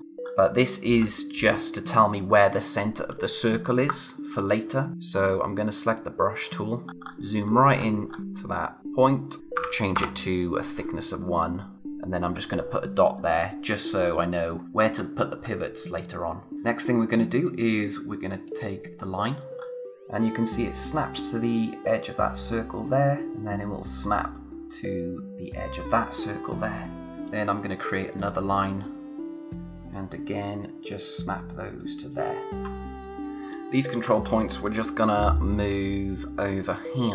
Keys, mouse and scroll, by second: 0.0-1.4 scroll up 1, 6.8-9.4 scroll up 1, 9.4 click, 9.9 Return, 12.2-14.9 scroll down 1, 15.8 space, 16.0 click, 16.3 space, 17.4 click, 19.1-19.9 scroll up 1, 22.4 click, 27.1 space, 28.1 click, 29.3 click, 34.7 Right.